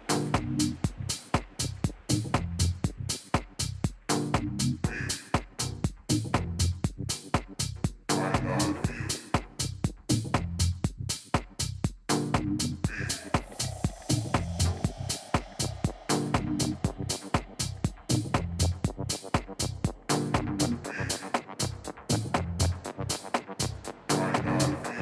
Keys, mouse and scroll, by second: 0.0-1.9 drag, 4.4 ctrl+z, 9.1 Tab, 12.3 middle click, 13.3-15.2 drag, 16.3-19.6 middle drag, 21.5 Tab, 22.2-25.0 typing.